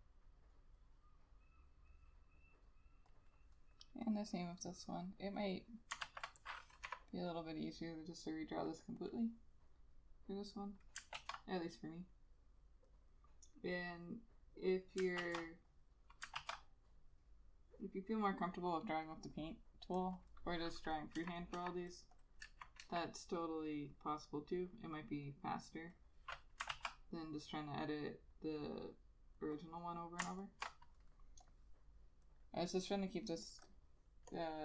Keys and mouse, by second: 6.1 ctrl+a, 7.0 Delete, 11.3 ctrl+z, 15.3 ctrl+z, 16.4 ctrl+z, 16.5 ctrl+z, 21.3 Delete, 21.7 Delete, 22.6 Delete, 22.9 Delete, 26.8 ctrl+z, 30.5 ctrl+shift+click.